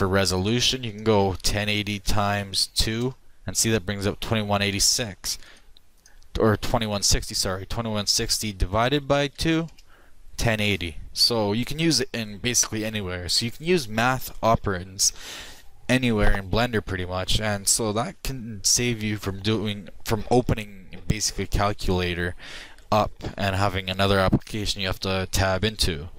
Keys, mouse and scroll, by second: 5.5-7.4 drag.